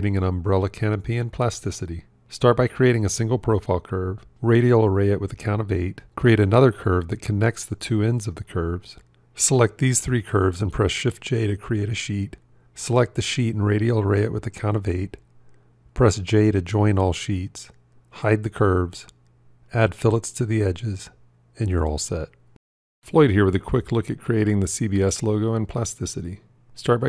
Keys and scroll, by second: 11.6 shift+j, 15.6 j, 26.8 shift+c.